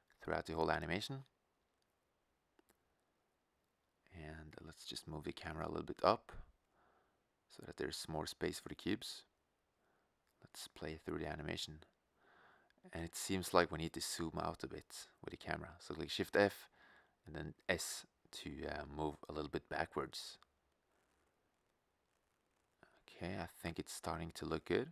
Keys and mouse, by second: 3.3 shift+f, 9.1-11.0 drag, 14.0-15.0 drag, 15.0 shift+f, 20.4-22.2 middle drag.